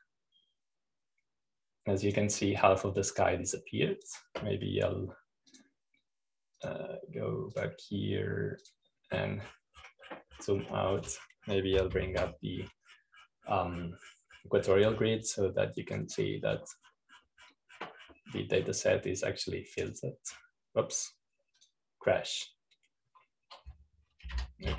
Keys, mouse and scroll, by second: 0.0-1.1 drag, 1.5-6.3 drag, 7.4 click, 8.4 click, 9.4 click, 10.5-21.2 drag, 17.1 shift+q, 21.6-24.2 drag.